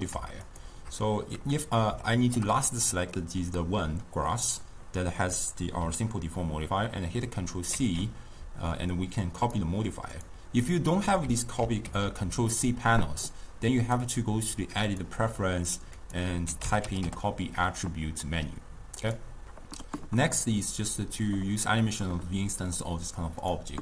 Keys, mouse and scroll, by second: 0.5 shift+click, 2.2-5.4 shift+middle drag, 7.8 ctrl+c, 10.3 drag, 10.7 click, 11.7 ctrl+c, 13.9-16.9 drag, 23.5 click.